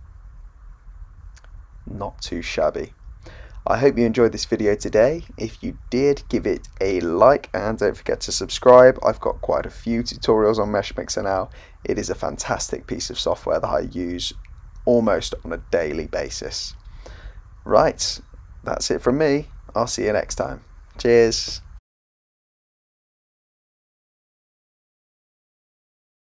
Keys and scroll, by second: 2.0 Return, 14.8-15.8 typing, 17.6 Return, 18.3 typing.